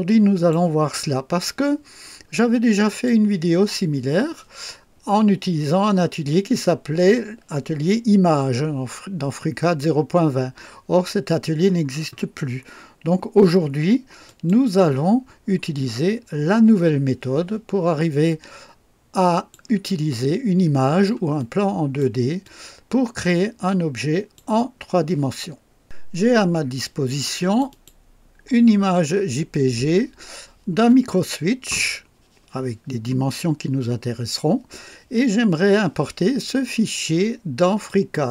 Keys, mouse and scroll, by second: 0.9-1.7 drag, 2.9 click, 14.3 click, 18.3-19.7 drag, 19.9-21.2 drag, 21.4-22.2 drag, 22.4-24.5 drag, 27.5 click, 37.9 click.